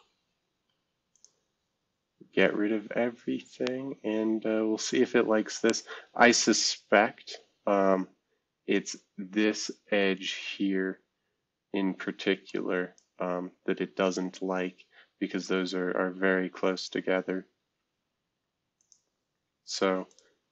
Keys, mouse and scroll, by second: 1.1 click, 6.0-7.6 scroll up 2, 7.6-8.3 scroll up 1, 8.9 scroll down 2, 11.6 alt+click, 12.4 middle click, 15.6 scroll down 2, 16.2 scroll down 2, 16.8 click, 17.3-18.8 scroll up 2.